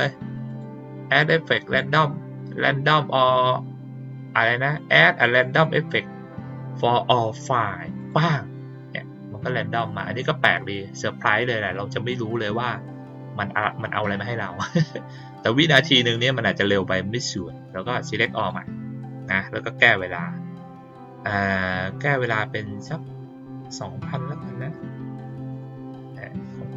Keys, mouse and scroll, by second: 0.4 click, 7.9 click, 18.3 click, 19.8 click.